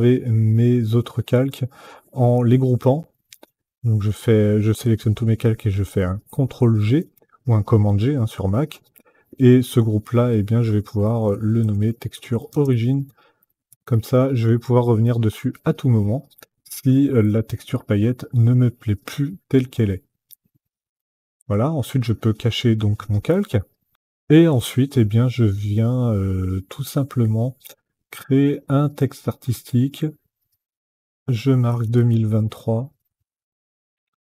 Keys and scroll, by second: 2.8 ctrl+g, 10.6-14.2 typing, 31.4 KP_2, 31.7 KP_0, 31.8 KP_2, 32.3 KP_3, 33.2 Left, 33.9 Right.